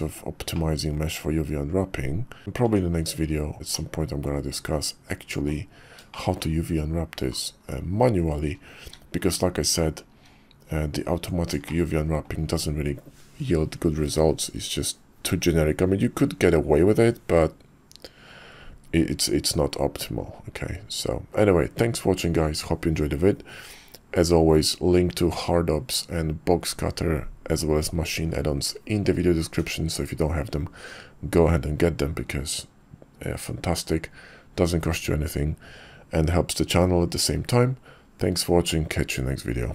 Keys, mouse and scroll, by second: 0.5-0.8 drag, 0.8-2.4 middle drag, 2.4 Tab, 2.4 `, 2.7 Tab, 3.7-5.1 drag, 5.1 middle click, 6.1 shift+middle click, 8.2 KP_5, 8.8 `, 9.4 KP_5, 10.1 `, 11.2 Tab, 11.7-12.2 shift+middle drag.